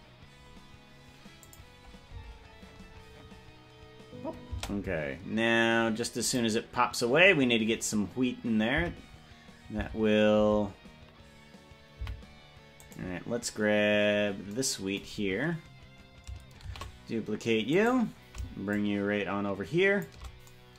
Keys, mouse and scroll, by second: 1.6 click, 2.2 space, 4.8 space, 6.4 click, 7.8-8.2 scroll up 3, 9.0 Left, 10.0 Left, 10.6 Left, 12.2 Right, 13.2 right click, 15.2-15.6 scroll down 5, 15.4 scroll up 1, 17.4 shift+d, 18.8-20.2 shift+drag.